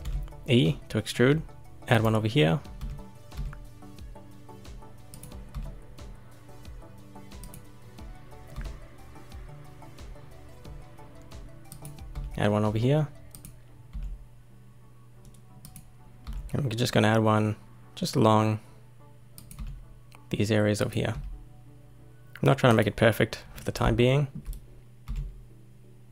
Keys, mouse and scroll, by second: 0.0 e, 2.7 e, 3.3 e, 5.5 e, 8.5 e, 12.1 e, 13.9 e, 16.2 e, 19.5 e, 21.1 e, 22.1 e, 23.7 scroll down 1, 24.0-25.0 shift+middle drag, 25.0 e.